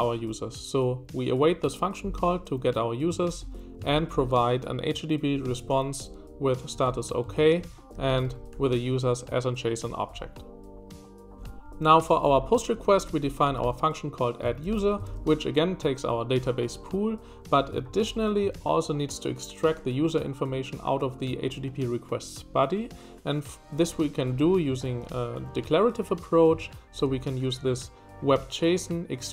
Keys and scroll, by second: 3.1 Escape, 3.2 j, 3.4 j, 5.4 Escape, 5.7-9.0 typing, 12.0-14.8 typing, 17.7 Escape, 18.0 typing, 24.7 Escape, 25.0 b.